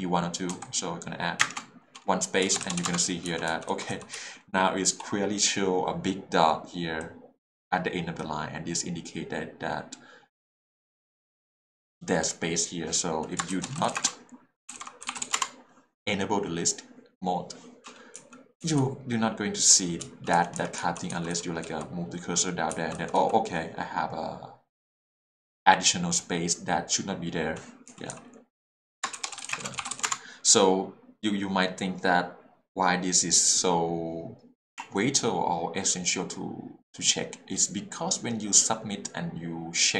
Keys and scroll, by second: 0.5 a, 1.4 space, 2.4 Escape, 2.8 w, 2.8 Return, 3.7 h, 3.7 l, 4.1 h, 13.8-15.3 typing, 15.4 Return, 18.1 k, 18.6 j, 18.8 l, 20.0 h, 20.3 k, 20.8 j, 21.3 l, 22.7 h, 22.9 l, 27.9 k, 29.3-30.0 typing, 30.0 Return.